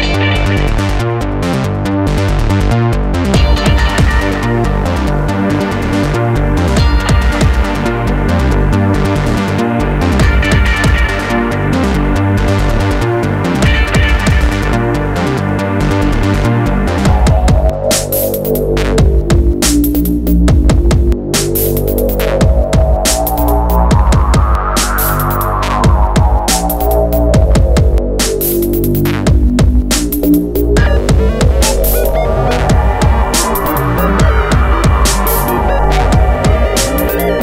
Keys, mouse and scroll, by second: 1.6 click, 2.8 click, 3.6 middle click, 5.0 scroll up 1, 5.5 middle click, 6.7 r, 8.2 click, 11.3 click, 11.7 F4, 15.6 middle click, 16.0 middle click, 16.2 F4, 17.2 click, 20.3 click, 21.4 ü, 22.1 click, 24.2 click, 24.8 F4, 26.9 alt+middle click, 28.1 scroll down 1, 28.5 F4, 30.6 click, 31.6 t, 32.5 z, 33.0 F3, 33.4 middle click, 33.8 scroll down 1.